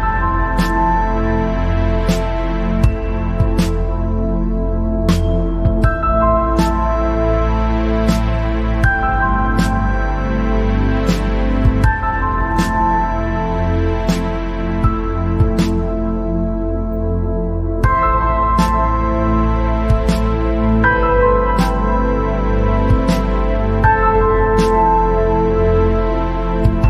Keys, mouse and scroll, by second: 3.7 scroll down 3, 4.2 click, 4.7 scroll up 2, 5.0 scroll down 1, 5.1-9.3 middle drag, 9.7 scroll up 1, 10.7 scroll up 1, 12.2 space, 13.7 space, 14.2 click, 15.0 alt+click, 16.9 ctrl+b, 23.1 alt+e.